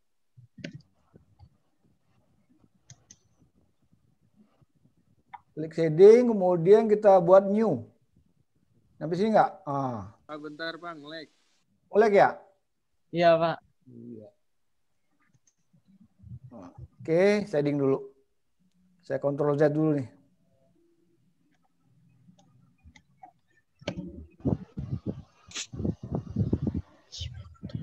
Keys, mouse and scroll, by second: 9.8 click, 16.1 ctrl+z.